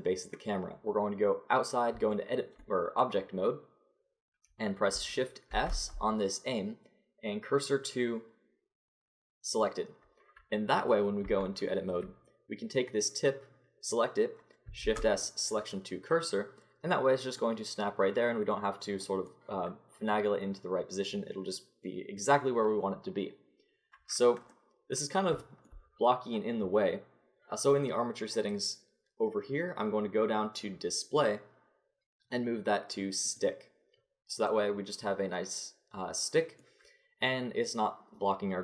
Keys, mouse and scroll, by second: 0.7 Tab, 2.1-3.3 middle drag, 5.5 shift+s, 10.8 click, 11.2 Tab, 12.7 middle click, 14.8 shift+s, 28.4-34.9 drag, 34.9 middle click, 35.5 middle click, 36.4-38.6 middle drag.